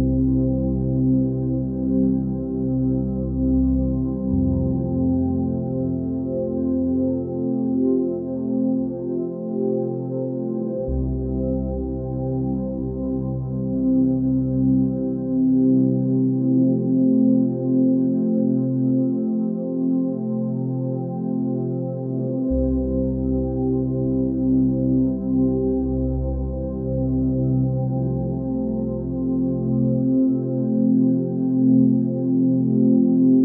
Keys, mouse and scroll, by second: 0.6 ctrl+space, 1.5 click, 3.3 ctrl+z, 3.7 x, 7.0 ctrl+z, 18.2 ctrl+space, 19.2 click, 19.9 ctrl+space, 26.8 click, 27.6 click, 29.3 ctrl+space, 29.9 space, 30.9 ctrl+space.